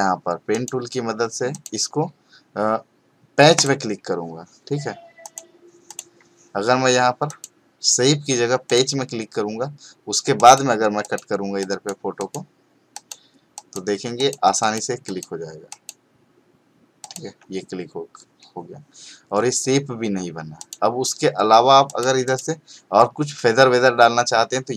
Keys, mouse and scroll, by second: 3.5 click, 20.6 click.